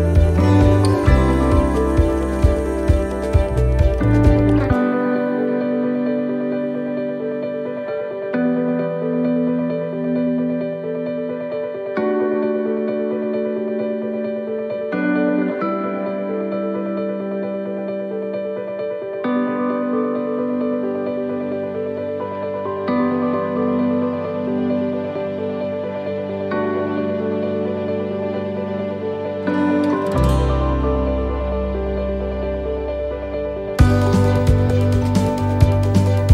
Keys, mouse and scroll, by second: 0.8 right click, 1.3 right click, 1.9 l, 2.8 click, 4.7 right click, 5.0 l, 5.9 click, 8.7 right click, 8.9 l, 10.2 click, 11.7 middle click, 12.1 scroll down 2, 13.1 right click, 14.2 l, 15.9 shift+d, 17.0 click, 22.6 click, 24.4 right click, 26.0 click, 28.7 click, 30.3 right click, 31.6 click, 32.7 right click, 33.7 click, 34.8 right click, 35.7 click.